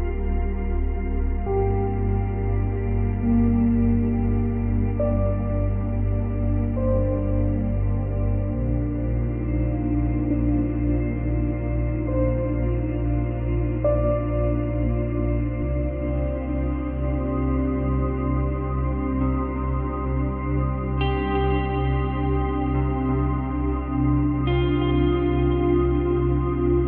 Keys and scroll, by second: 1.7 space, 3.1 space, 6.0 Delete, 6.7 space, 8.0 space.